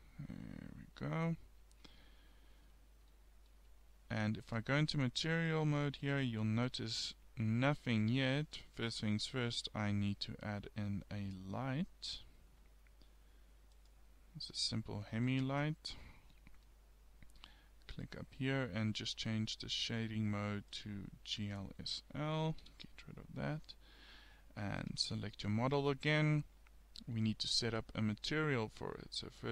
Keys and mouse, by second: 1.4-2.4 middle drag, 4.5 click, 5.4 click, 6.6 Tab, 8.2 middle click, 9.5 shift+a, 15.1-16.6 middle drag, 22.7 n.